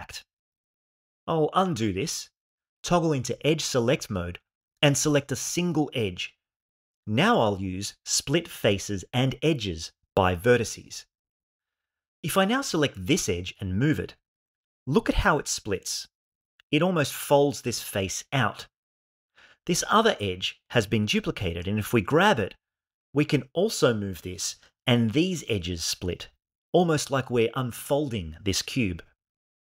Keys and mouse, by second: 1.4 right click, 1.9 ctrl+z, 2.3 ctrl+z, 2.8 ctrl+z, 4.0 2, 5.7 click, 8.1 alt+m, 12.2 click, 13.3 g, 15.6 z, 16.5 click, 20.4 click, 21.5 g, 22.0 x, 24.9 click.